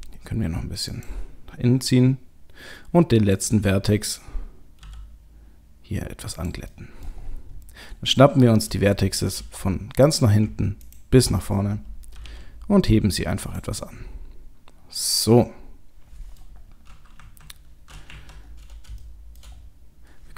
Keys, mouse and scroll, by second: 3.4 click, 4.1 click, 4.7 g, 6.7 middle click, 7.2-7.8 scroll down 6, 8.2 scroll down 1, 8.2 middle click, 8.9 shift+middle click, 9.6-10.4 scroll up 1, 10.4-10.9 scroll up 1, 10.9 ctrl+click, 12.2 g, 13.8 middle click, 16.7 scroll down 1, 17.1 KP_3, 18.1 KP_1, 18.5-18.9 scroll up 3, 19.0 shift+middle click, 19.6-20.3 scroll up 3.